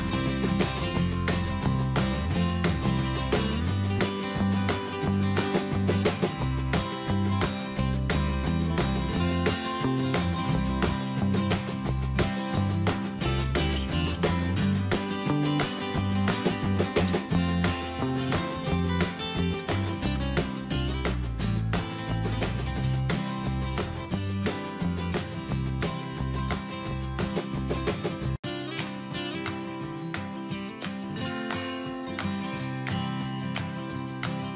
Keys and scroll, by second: 7.0 ctrl+z, 8.7 shift+F6, 18.7 ctrl+shift+], 29.4 ctrl+space.